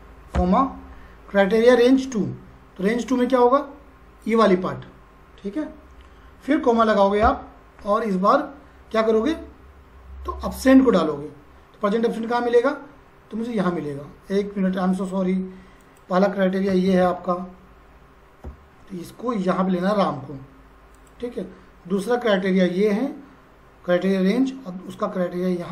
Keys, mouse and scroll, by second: 0.3 ,, 4.2 click, 7.3 ,, 15.8 click, 18.5 ,, 19.8 click.